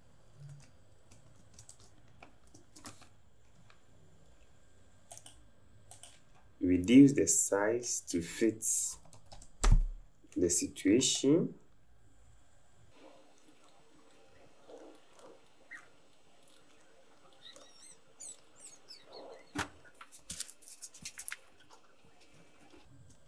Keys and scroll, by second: 0.5 w, 2.8 v, 9.3 KP_0, 9.6 Return, 14.3 Down, 14.4 Down, 14.4 Down.